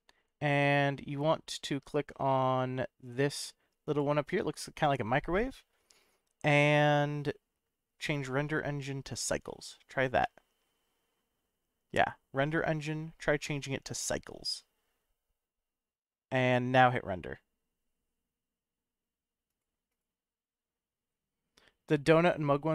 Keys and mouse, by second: 3.9 click, 8.2-9.6 drag, 19.5 click, 19.9 click.